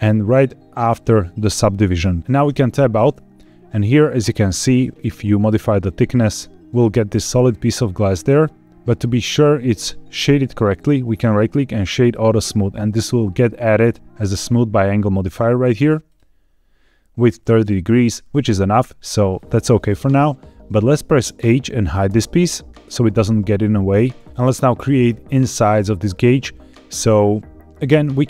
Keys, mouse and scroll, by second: 2.2 shift+middle click, 2.2 scroll down 1, 2.4 Tab, 3.0 middle click, 4.1-4.4 scroll up 1, 5.1-8.7 shift+drag, 9.6 middle click, 10.9-12.0 right drag, 13.0-14.0 scroll down 4, 14.8-15.3 scroll up 2, 15.6 click, 16.0 click, 18.7 scroll down 3, 19.3 middle click, 22.0 h.